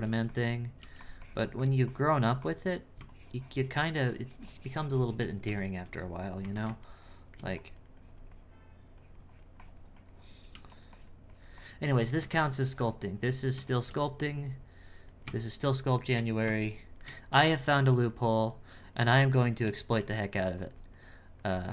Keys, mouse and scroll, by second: 0.8 f, 1.2-5.6 drag, 6.9 shift+middle click, 7.6-10.5 drag, 10.9-16.6 drag, 16.6-17.8 shift+middle drag, 18.4-19.9 drag, 20.6-21.7 drag.